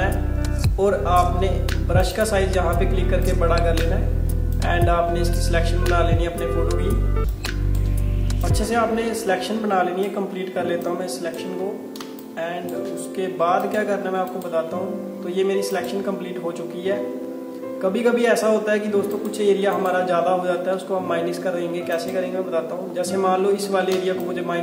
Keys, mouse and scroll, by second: 2.1 click, 7.2 space, 7.3 click, 7.6 space, 8.5 click, 12.0 space, 12.3 click, 12.6 space, 13.6 click, 19.2 click, 23.7 alt+scroll up 1, 24.0 space, 24.3 click, 24.5 space.